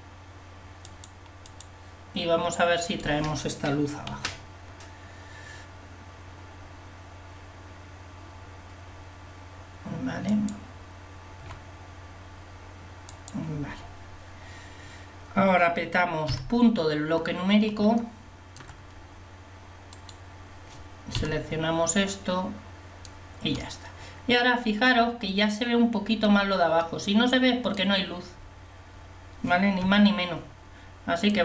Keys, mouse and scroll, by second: 1.7-4.2 drag, 4.2 g, 11.5 g, 16.3 KP_Decimal, 18.0 middle click, 21.2 KP_Decimal, 29.9 KP_1.